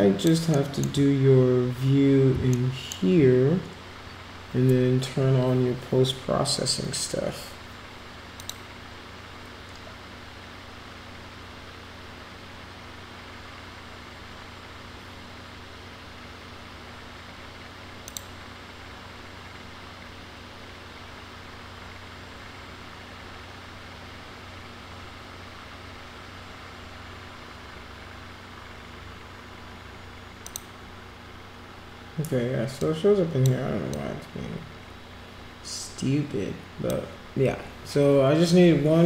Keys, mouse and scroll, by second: 0.5 alt+middle click, 2.6 alt+middle click, 8.4 click, 18.0 click, 30.5 click, 32.8 click, 33.9-36.9 drag.